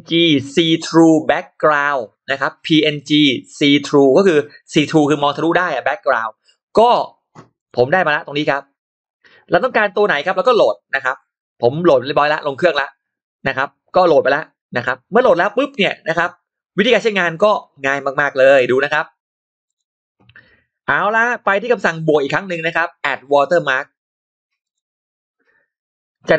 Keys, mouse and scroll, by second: 7.4 click, 8.4-8.8 scroll up 1, 8.9-9.5 scroll down 2, 10.1 scroll up 2, 10.8 click, 18.3 click, 19.5 click, 24.5 click.